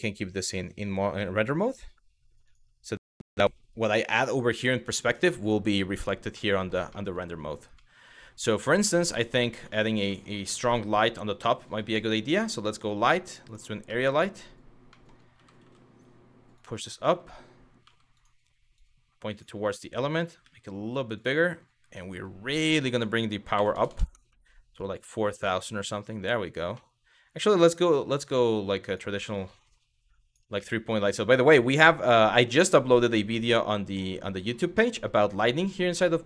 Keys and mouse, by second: 2.1 click, 6.0-6.3 middle drag, 6.5 shift+middle drag, 7.5-8.1 middle drag, 8.6-9.0 middle drag, 9.3-9.9 shift+middle drag, 10.2 shift+a, 13.6-13.9 middle drag, 14.5 middle click, 15.0 g, 15.2 z, 16.2 click, 16.7 middle click, 17.8 click, 18.4 click, 20.0 s, 20.8 click, 22.4-24.0 drag, 23.5 KP_0, 26.4 middle click, 27.6 g, 28.5 click, 29.1 click, 30.3 middle click, 31.4 g, 32.0 click, 34.5 middle click, 35.3 click.